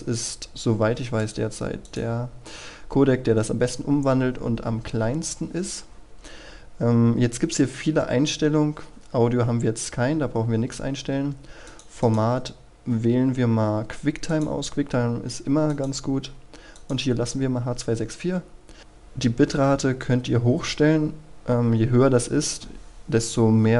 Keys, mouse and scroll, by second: 1.2 click, 2.2-5.9 scroll down 1, 11.7 click.